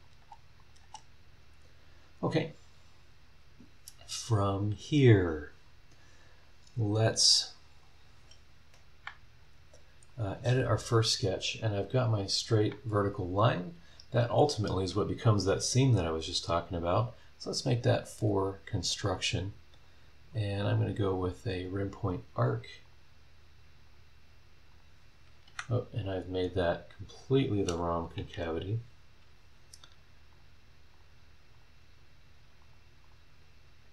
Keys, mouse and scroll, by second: 0.2 space, 0.6 click, 0.8 space, 2.8 scroll up 2, 3.1 scroll down 2, 7.8 click, 10.1 click, 11.1 scroll down 2, 12.5 click, 18.3 click, 18.9 click, 19.7 click, 20.3 click, 21.5 click, 22.8 click, 23.8 click, 24.7 click, 25.4 Escape, 25.8 click, 27.2 click, 27.5 middle click, 27.7 click, 28.3 Delete, 30.3 click, 30.9 click, 31.5 click, 32.6 click, 33.0 click.